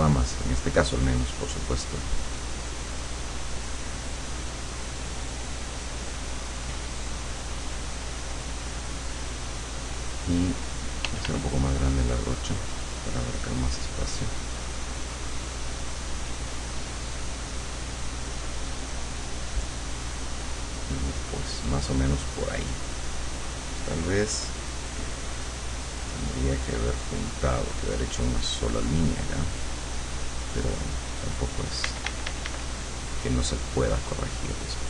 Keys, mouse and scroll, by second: 9.5-10.6 drag, 11.1 f, 11.7-13.9 drag, 14.1-18.3 drag, 18.4-19.9 drag, 20.9-23.1 drag, 23.3-25.0 drag, 25.4-30.5 drag, 31.9 d, 32.9-34.8 drag.